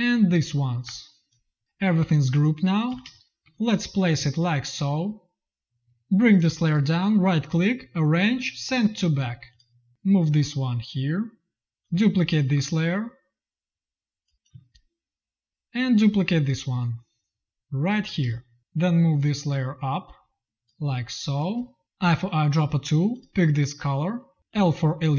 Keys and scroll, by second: 0.7 ctrl+g, 2.0 z, 2.8 v, 2.9 space, 14.3 space, 15.5 space, 18.1 space, 20.9 space, 21.5 v, 21.9 i, 24.4 l.